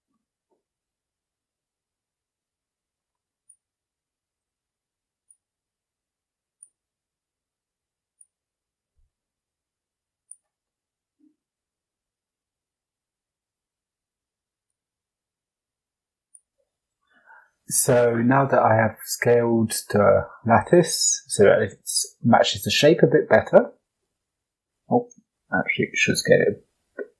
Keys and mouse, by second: 0.4 KP_5, 1.5 s, 3.8 g, 5.3 s, 7.0 g, 8.3 s, 10.6-11.3 drag, 11.7 s, 14.7 g, 16.4 s, 21.4 middle click, 22.1-23.2 middle drag, 24.0 KP_7, 24.9 s.